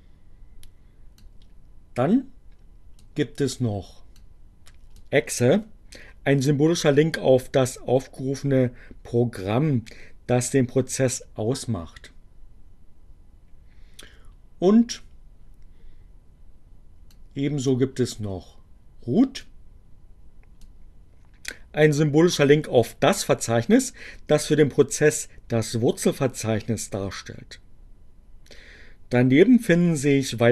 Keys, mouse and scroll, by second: 1.2-2.9 drag, 4.1 click, 17.0 click, 19.3-20.4 drag.